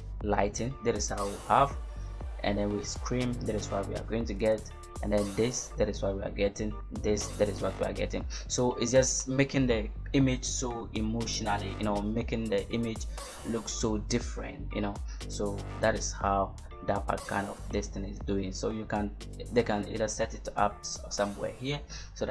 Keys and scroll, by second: 13.3 v.